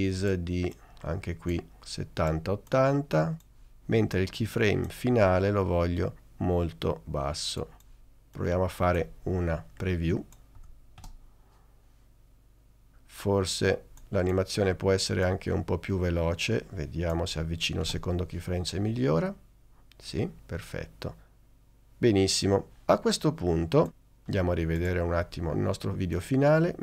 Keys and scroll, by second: 10.4 b, 11.1 space, 17.9 space.